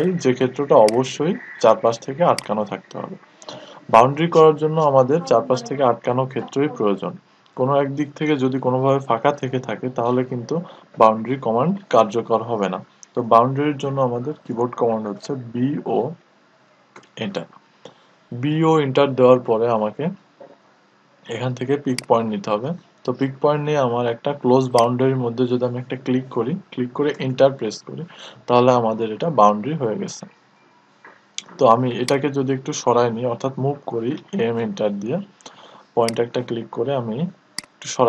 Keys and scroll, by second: 14.8-15.5 typing, 26.6 Return, 33.5 Return, 33.5 m.